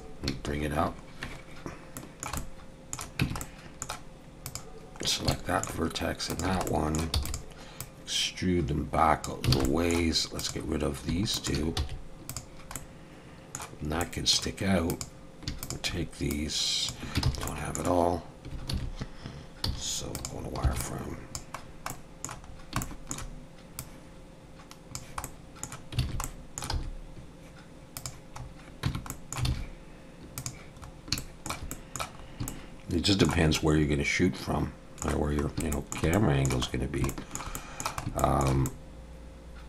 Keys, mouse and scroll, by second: 2.0 shift+middle click, 2.4 middle click, 3.2 Tab, 3.4 middle click, 4.5 click, 5.0 scroll down 2, 5.3 shift+middle click, 6.3 shift+click, 6.7 middle click, 7.2 e, 7.8 click, 9.5 alt+a, 9.7 middle click, 10.4 click, 11.4 shift+click, 11.8 x, 12.8 middle click, 14.0 middle click, 14.9 click, 15.6 shift+click, 16.3 click, 17.3 ctrl+z, 17.5 middle click, 18.7 alt+a, 19.7 z, 20.6 b, 21.7 scroll down 1, 21.9 middle click, 22.5 scroll down 2, 22.8 shift+middle click, 23.8 click, 25.2 middle click, 26.0 alt+a, 26.2 middle click, 26.7 z, 28.4 scroll up 1, 28.8 Tab, 29.1 middle click, 29.5 alt+a, 30.5 click, 30.8-31.2 scroll up 3, 31.2 shift+middle click, 31.7 middle click, 32.2 scroll up 1, 32.5 shift+middle click, 33.5 middle click, 35.4 scroll up 1, 35.7 shift+middle click, 36.1 middle click, 36.8 scroll down 1, 37.1 shift+middle click, 37.5 middle click, 38.2 shift+middle click, 38.6 middle click.